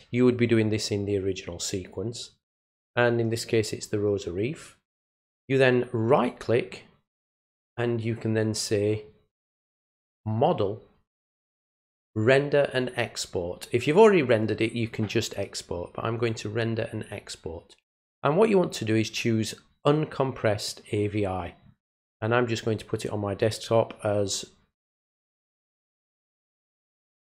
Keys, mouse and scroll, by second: 6.1 right click, 16.2 click, 25.6 click.